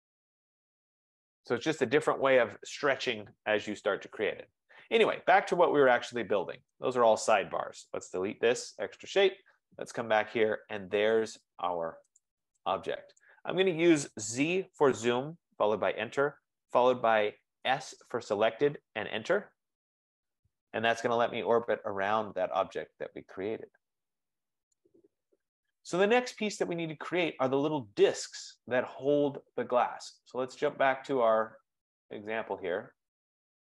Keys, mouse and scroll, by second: 0.6 right click, 1.4-1.8 scroll, 4.8 scroll, 6.8 click, 7.8-8.9 typing, 10.0-11.8 scroll, 10.4 Delete, 12.3 click, 12.9 Return, 13.3 click, 14.7 z, 15.1 Return, 17.7 s, 18.9 Return, 20.3 scroll, 23.0 middle click, 24.5 scroll, 24.8 right click, 26.1-29.9 right drag, 31.1 click, 32.4-33.2 scroll.